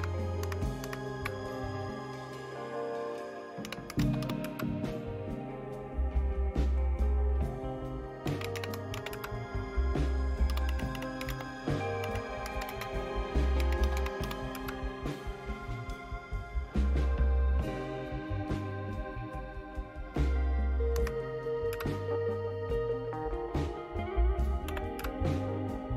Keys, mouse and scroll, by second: 0.4 super+Right, 0.8 super+Right, 3.4-4.7 typing, 8.0-15.0 typing, 18.3-20.9 right drag, 20.9 Right, 21.7 typing, 24.6 y, 24.9 Return.